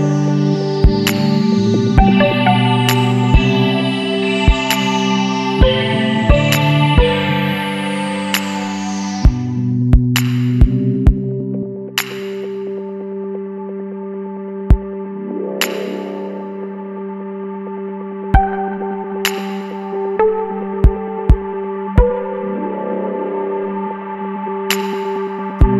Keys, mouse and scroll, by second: 1.4 scroll up 1, 2.3-2.6 scroll up 1, 2.9 scroll down 1, 5.3 click, 6.5 click, 7.3 space, 10.2 click, 12.3 click, 13.6 click, 15.0 click, 17.0 click, 18.5 click, 20.9 click, 21.4 scroll up 1, 22.1 scroll up 1, 22.9 Escape, 23.0 click, 24.1 click, 25.3 click.